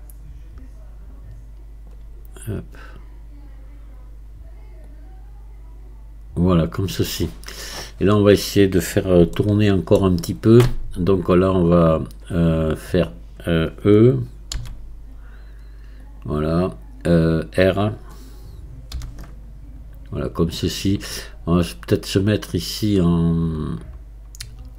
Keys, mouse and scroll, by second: 9.4-12.4 shift+middle drag, 23.3-24.7 drag.